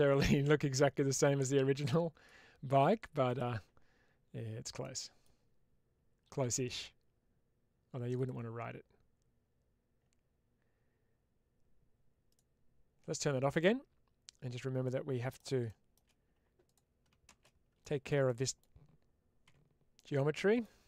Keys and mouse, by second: 4.7-5.1 middle drag, 8.0 click, 12.1 click, 14.7-15.2 middle drag, 16.6 click, 18.1 middle click, 19.8 middle click.